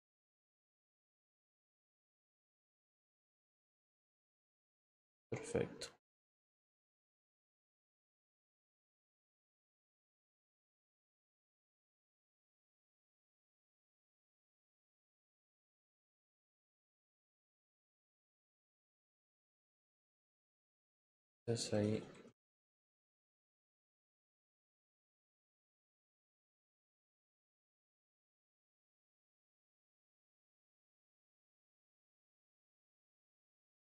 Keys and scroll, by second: 24.0 ctrl+t, 24.9 Return.